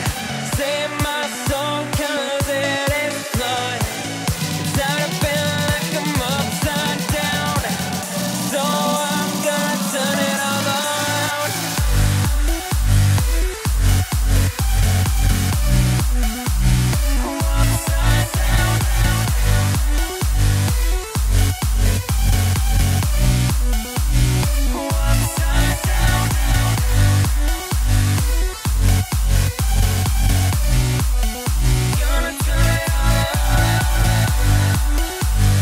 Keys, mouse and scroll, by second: 0.5 Tab, 1.0 click, 1.7 click, 2.1 Tab, 3.1 ctrl+b, 5.6 a, 6.5 ctrl+b, 10.7 Tab, 11.0 click, 11.5-12.4 middle drag, 12.4 click, 13.7 Tab, 14.4 a, 15.3 ctrl+b, 17.3-18.9 middle drag, 18.9 Tab, 19.2 click, 21.5 click, 22.7 space, 25.4 space, 26.7 click, 31.4 click, 32.1-35.6 drag.